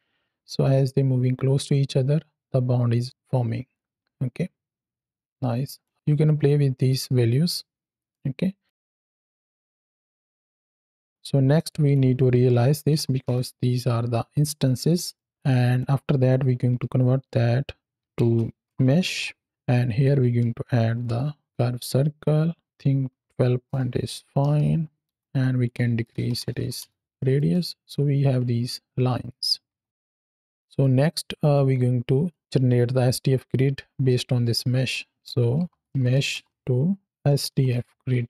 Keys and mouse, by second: 6.7 click, 8.0 middle click, 8.7 middle click, 8.9 click, 9.3 x, 9.5 drag, 10.2 shift+click, 10.4 click, 11.0 drag, 11.5 drag, 14.7 drag, 15.0 middle click, 15.3 click, 19.6 click, 22.6-25.0 drag, 25.5-26.7 drag, 27.0 middle click, 27.7 ctrl+shift+click, 29.2 click, 29.5 x, 29.9 middle click, 30.1 click, 30.7 click, 32.2-34.8 drag.